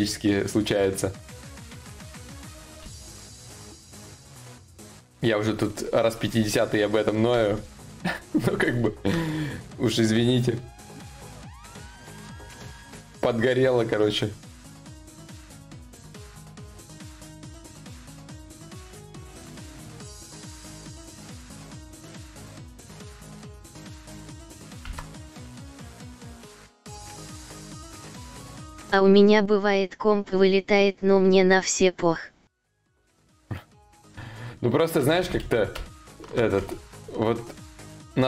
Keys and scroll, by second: 2.4 ctrl+z, 24.4 ctrl+z, 34.7 ctrl+y, 34.8 ctrl+z, 35.4 ctrl+z, 35.4 y.